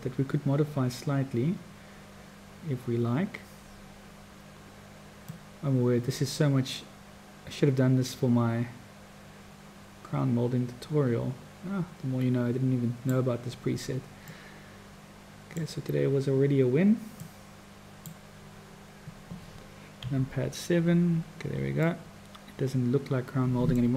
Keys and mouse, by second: 5.3-13.2 drag, 14.3 click, 14.9 middle click, 17.2 click, 19.9 KP_7, 21.9-23.1 middle drag, 23.1 click, 23.2 middle click.